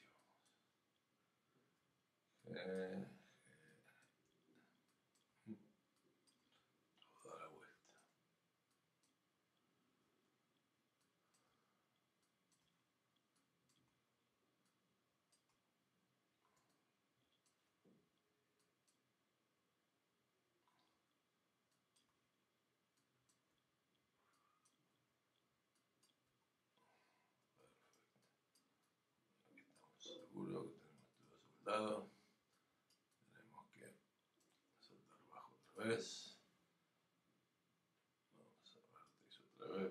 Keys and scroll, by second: 1.8 g, 23.5 g, 24.9 typing.